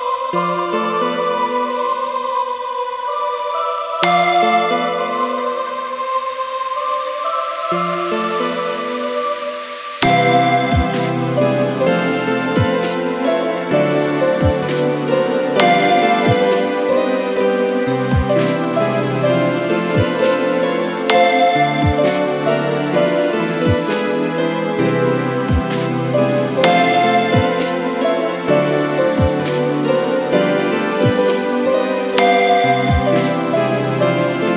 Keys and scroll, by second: 25.4 ctrl+t, 28.4 Return.